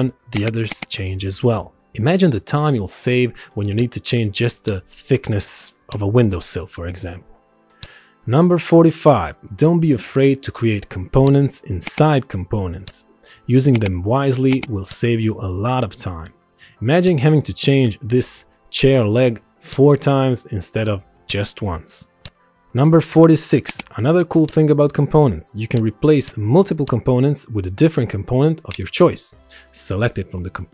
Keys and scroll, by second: 2.6 a, 5.1 ctrl+1.